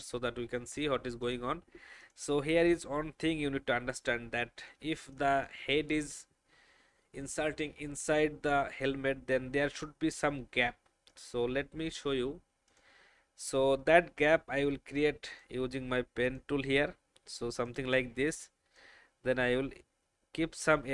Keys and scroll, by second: 4.9 space.